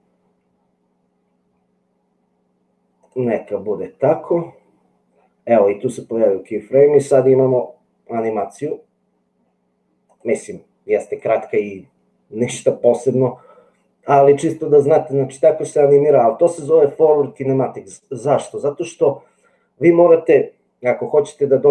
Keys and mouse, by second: 10.1 click.